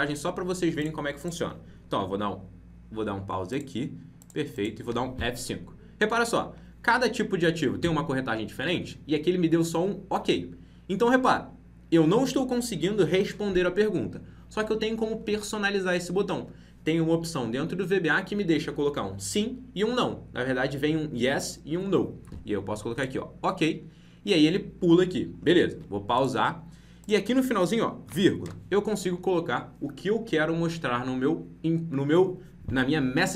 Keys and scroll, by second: 4.8 F5.